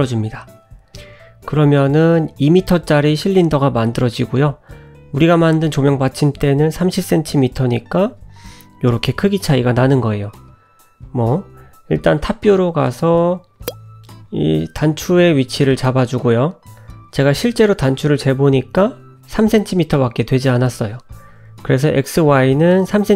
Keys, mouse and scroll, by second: 2.0-3.5 scroll down 9, 4.4 s, 7.6 KP_Decimal, 8.3-9.8 scroll down 9, 9.8 `, 10.9 shift+middle click, 11.5 s, 12.4 g, 12.9 s, 14.0-14.4 scroll up 2, 15.2 n, 16.4 click, 21.8 middle click.